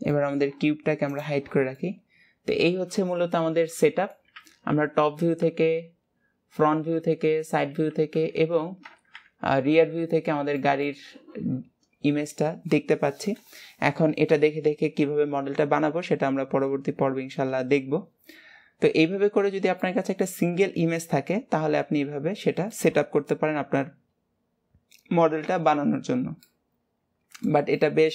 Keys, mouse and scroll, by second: 0.3 middle click, 1.2 click, 1.9-4.5 middle drag, 4.5 KP_7, 6.1 scroll up 3, 7.1 KP_3, 9.1 ctrl+KP_1, 10.2-10.7 scroll up 1, 10.7-13.9 shift+middle drag, 19.0 scroll down 2, 19.6 scroll up 1, 20.0-23.0 middle drag, 26.6-28.1 middle drag.